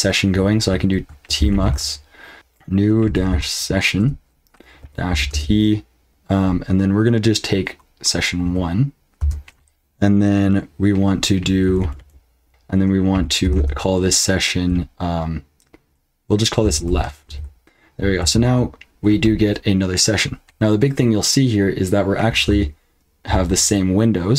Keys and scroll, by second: 1.0-5.3 typing, 8.4 1, 9.2 space, 11.6-14.0 typing, 16.4-17.8 typing, 18.2 ctrl+l.